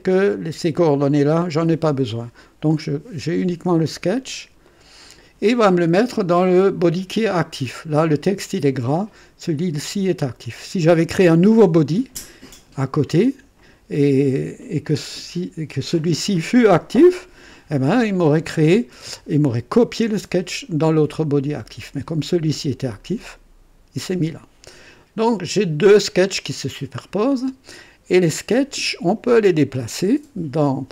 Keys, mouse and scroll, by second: 1.4 click, 4.6 click, 26.9 click.